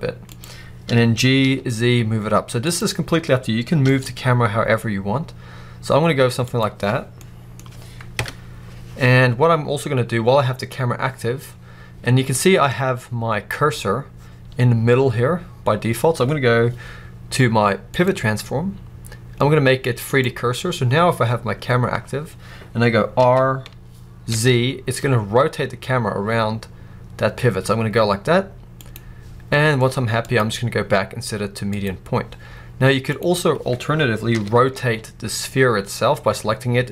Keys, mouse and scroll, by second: 0.2 click, 0.7 g, 2.6 click, 3.7 g, 6.4 click, 9.3 scroll up 1, 9.8-10.9 scroll down 1, 12.2-14.7 scroll up 1, 17.8-28.8 drag, 23.1 r, 30.1-33.1 drag, 34.1 r.